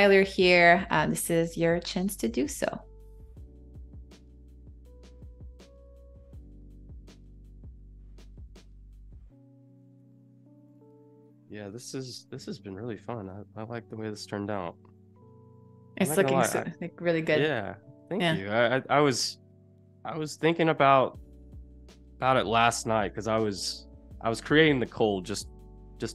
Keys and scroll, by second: 0.3 Left, 1.2 Down, 2.4 i, 3.9 v, 11.9 shift+super+[, 12.8 space, 15.9 super+y, 23.6 super+=, 23.8 space.